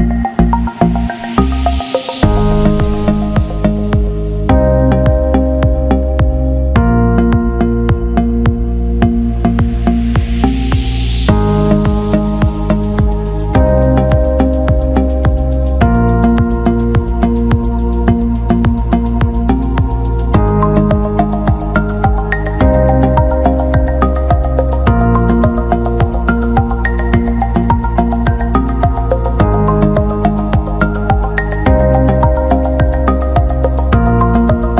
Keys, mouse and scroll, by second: 0.8-2.1 drag, 3.0 click, 3.8-6.5 drag, 9.4 alt+middle click, 10.6 ctrl+z, 12.1-13.8 drag, 14.7-17.2 alt+middle drag, 18.4-21.4 drag, 22.0 alt+shift+middle click, 22.6 alt+shift+middle click, 23.4 click, 23.6 click, 24.3-25.4 drag, 26.3 alt+shift+middle click, 31.7 alt+shift+middle click, 32.7-34.3 drag, 34.6 click.